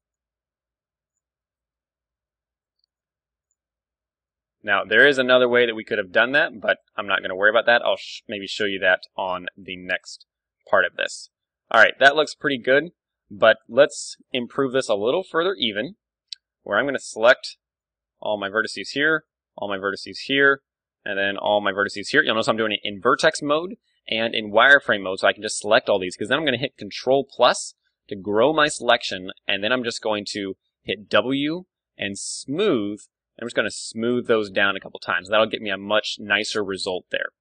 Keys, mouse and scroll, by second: 0.0 click, 1.1-2.9 drag, 1.4 middle click, 2.6 ctrl+r, 2.9 middle click, 3.5-5.2 drag, 4.6 ctrl+r, 5.2 middle click, 5.6-7.2 drag, 5.8-8.3 middle drag, 6.7 ctrl+r, 7.6-9.3 drag, 8.9 Tab, 9.1 KP_1, 9.3-14.1 middle drag, 11.1 Tab, 11.4 z, 12.1 z, 12.8 a, 13.6 ctrl+Tab, 14.7 ctrl+Tab, 15.5 KP_1, 16.1-17.9 middle drag, 16.4 z, 16.7 b, 18.9 b, 20.3 b, 22.8 z, 23.5-25.4 middle drag, 24.1 z, 24.5 z, 27.1 ctrl+KP_Add, 29.8 z, 30.5 z, 30.9 w, 32.9 w, 33.4 w, 33.9 Tab, 34.1-35.4 middle drag.